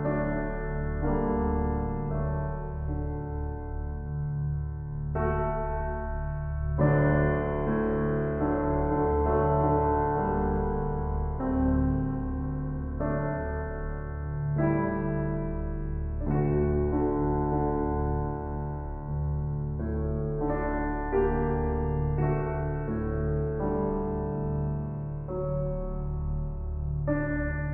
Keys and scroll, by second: 9.5 ctrl+g, 16.1 ctrl+g, 17.5 ctrl+j, 23.5 ctrl+t.